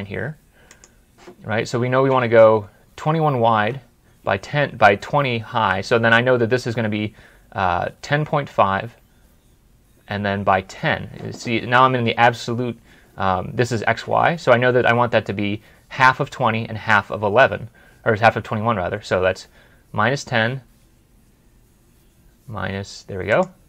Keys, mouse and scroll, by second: 2.2 right click, 2.3 alt+Tab, 3.3 alt+Tab.